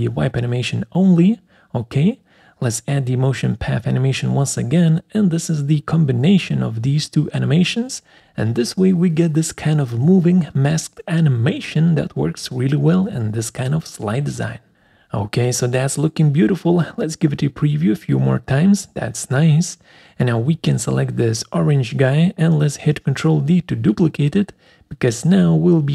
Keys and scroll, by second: 2.9 ctrl+z, 10.9 Delete, 25.2 ctrl+d.